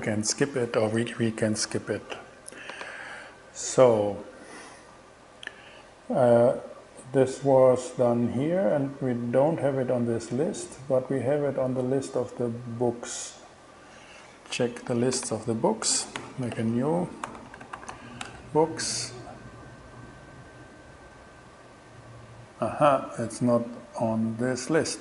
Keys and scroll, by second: 16.2 super+n, 17.3-18.4 typing, 19.3 shift+Return.